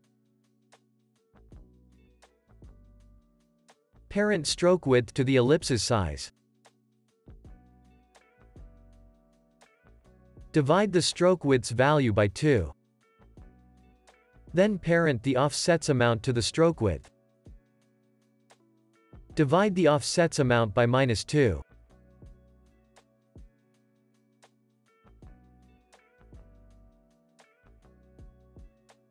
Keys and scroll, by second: 14.0 Return, 22.3-23.6 typing.